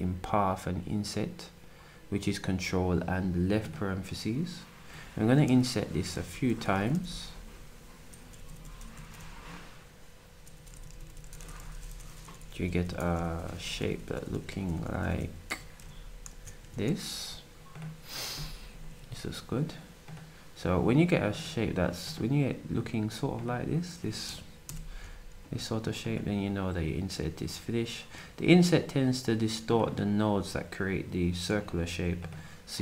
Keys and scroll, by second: 6.1 ctrl+shift+9, 6.6-10.4 typing, 31.4 s.